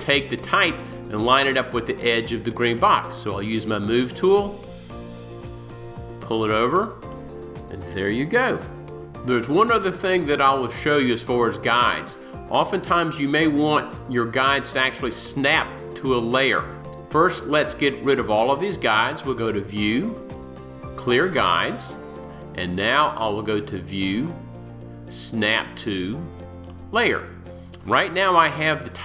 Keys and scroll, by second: 3.9 v.